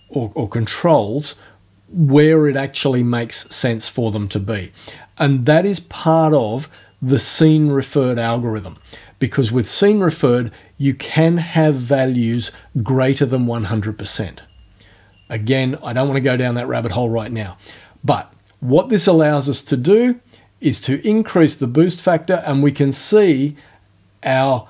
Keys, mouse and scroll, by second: 19.8-24.6 drag.